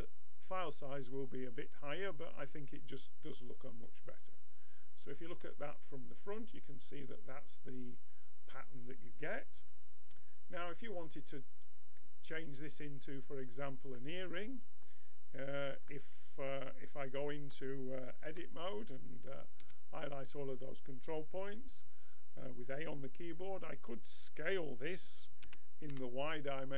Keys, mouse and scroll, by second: 3.2-5.2 drag, 9.0-11.1 middle drag, 14.0-15.5 middle drag, 18.2 Tab, 19.6 a, 25.5 s.